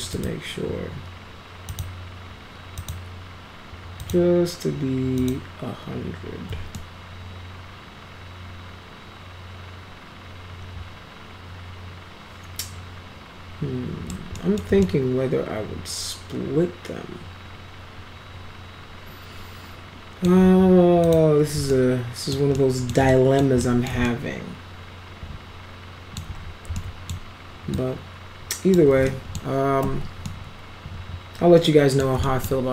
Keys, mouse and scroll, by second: 0.1 click, 1.7 click, 2.8 click, 4.0 click, 5.2 click, 6.8-14.1 alt+middle drag, 14.4 middle click, 14.8-20.2 alt+middle drag, 21.0 click, 21.7-22.3 alt+middle drag, 22.6 alt+middle click, 23.1 alt+middle click, 23.6 middle click, 24.1-26.2 alt+middle drag, 26.7 alt+middle click, 27.7-28.8 drag, 29.1 alt+middle click, 29.8 alt+q, 30.3-32.0 alt+middle drag, 32.2 middle drag.